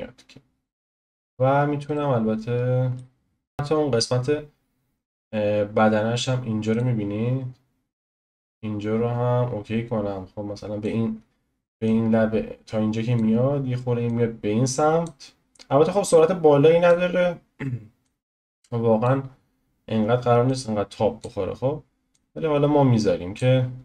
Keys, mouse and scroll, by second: 1.2-1.9 scroll up 4, 1.9-3.2 shift+middle drag, 3.2-3.5 scroll down 1, 3.5-6.8 drag, 8.2 click, 11.8-14.1 drag, 15.8-18.1 drag, 19.3-20.5 scroll down 1, 20.5-22.1 drag, 23.7-23.8 scroll down 1.